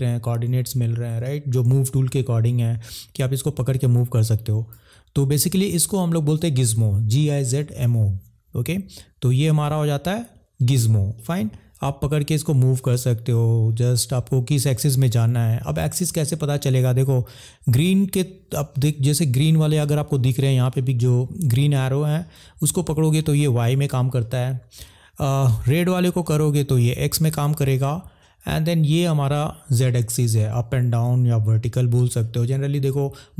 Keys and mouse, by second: 4.1 click, 5.2 ctrl+z, 22.2 click, 25.6 click, 28.3 click.